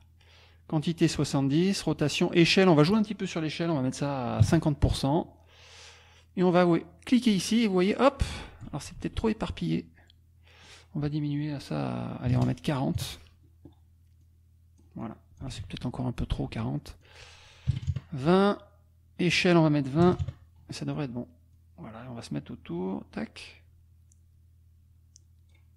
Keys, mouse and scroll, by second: 2.6 click, 4.4 KP_0, 7.3-8.8 drag, 9.0 ctrl+z, 10.6 click, 12.3 KP_4, 12.4 KP_0, 14.2 click, 15.5 ctrl+click, 15.6 ctrl+z, 16.4 ctrl+z, 17.0 ctrl+click, 17.7 KP_2, 17.9 KP_Enter, 19.3 click, 20.0 KP_2, 20.2 KP_Enter, 21.5-25.7 drag.